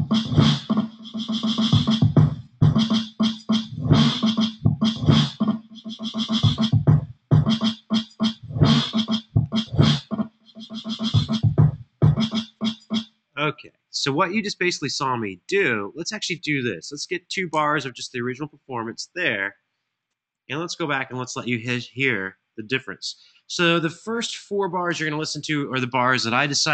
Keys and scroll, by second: 11.0 super+[, 12.7 space, 16.7 2, 17.2 Return, 20.1 super+[, 24.6 alt+f.